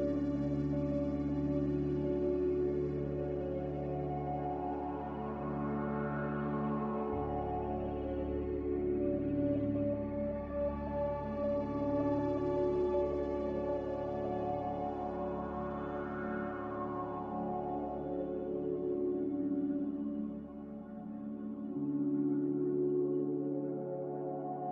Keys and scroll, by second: 11.8 b, 13.6 ctrl+b, 24.2 a.